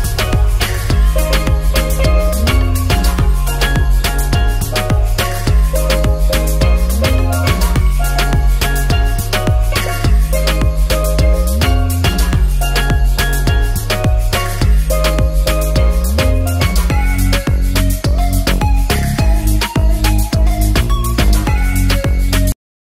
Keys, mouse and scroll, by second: 1.2-3.0 drag, 2.7 KP_0, 11.5 ctrl+s, 11.8-14.7 drag, 13.9 KP_0, 15.9 drag, 17.0 ctrl+s, 18.1 drag, 18.6-19.3 drag, 19.8 click, 20.7 click, 21.2 ctrl+s.